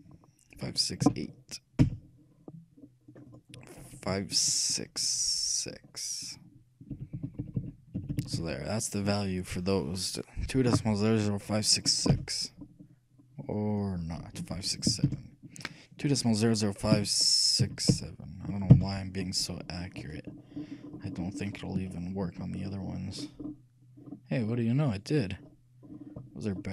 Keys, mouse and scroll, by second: 3.3-5.1 drag, 7.8 7, 8.3 BackSpace, 8.5 6, 13.6-15.4 drag, 20.2 scroll up 1, 22.2-25.2 shift+middle drag, 26.2-26.7 middle drag.